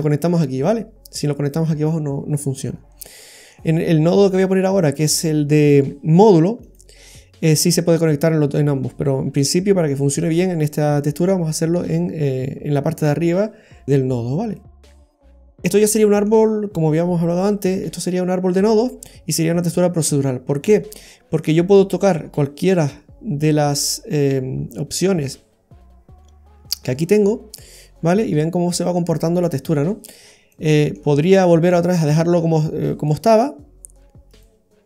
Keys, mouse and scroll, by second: 2.4-3.0 scroll up 4, 3.0 middle click, 4.6 click, 14.3 scroll down 2, 14.5 middle click, 15.0-15.9 scroll down 11, 15.9 middle click, 20.6-21.3 scroll up 3, 21.3 middle click, 21.9-22.5 scroll up 5, 23.8 click, 30.0-30.8 scroll down 4, 30.5 middle click, 32.1-32.7 scroll up 4, 33.0 middle click, 33.0-33.7 scroll up 3.